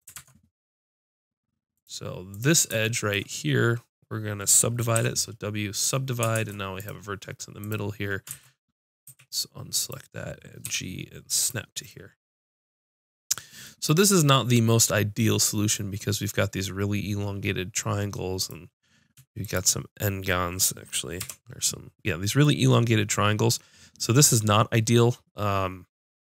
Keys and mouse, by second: 0.1 ctrl+Tab, 2.2-4.9 drag, 4.9 w, 6.4 ctrl+Tab, 7.2 click, 8.1-9.6 drag, 8.4 ctrl+z, 9.1 a, 9.8 click, 10.6 g, 18.4-21.2 drag, 21.2 j, 22.4 click.